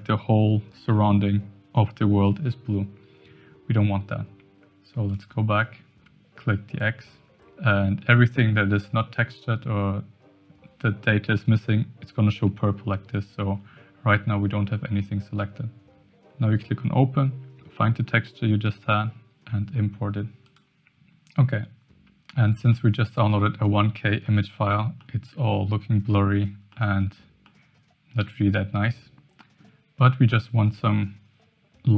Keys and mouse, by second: 5.4 click, 20.4 click, 22.7-23.6 middle drag, 24.2-25.0 middle drag, 25.2-25.6 middle drag, 26.7-27.1 middle drag, 27.5-29.6 middle drag.